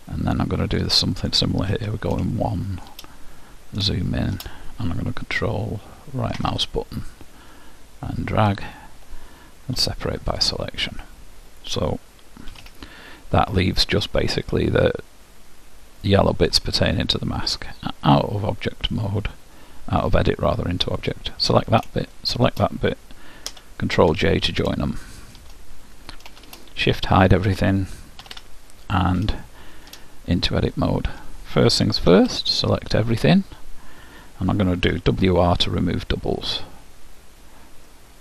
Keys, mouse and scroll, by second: 1.8 KP_1, 4.2-7.0 middle drag, 5.4-7.2 right drag, 9.8 p, 11.1-13.1 middle drag, 12.6 z, 13.6-15.7 middle drag, 18.3-19.4 drag, 19.0-21.0 middle drag, 21.2-24.1 drag, 23.7 ctrl+j, 25.0 middle click, 26.5 shift+h, 28.4 Tab, 29.5-34.4 middle drag, 32.2 a, 35.0 w, 38.0-38.2 middle drag.